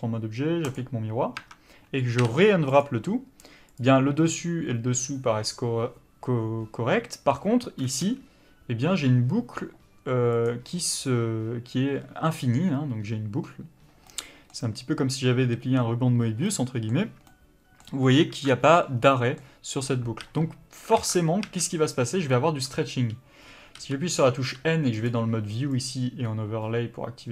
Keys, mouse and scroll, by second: 0.7 click, 1.4 Tab, 2.9 u, 3.7 click, 14.1 middle click, 18.0-18.9 scroll up 1, 18.9 scroll down 1, 19.0 middle click, 20.2 a, 21.0 alt+a.